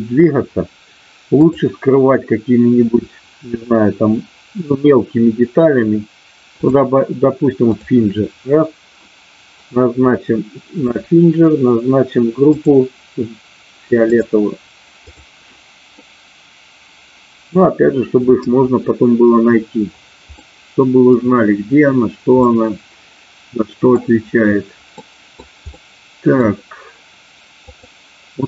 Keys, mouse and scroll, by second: 1.5-6.8 drag, 7.8 click, 10.8 click, 12.6-14.3 drag, 15.1 click, 16.0-17.5 middle drag, 20.4 middle click, 22.4-24.0 middle drag, 25.0 middle click, 25.6 middle click, 27.6-28.4 drag.